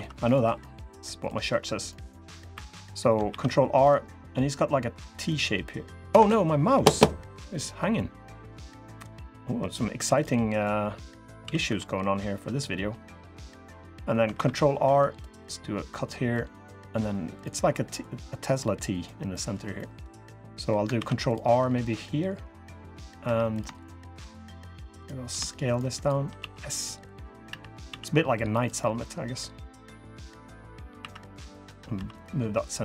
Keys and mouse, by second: 0.4 click, 1.9 click, 2.3 3, 3.0 ctrl+r, 9.7 3, 11.2 s, 14.1 ctrl+r, 16.1 click, 19.1 click, 19.6 click, 20.7 ctrl+r, 23.0 3, 26.1 s, 27.2 e, 27.6 s, 29.1 click, 30.7 2, 31.7 3.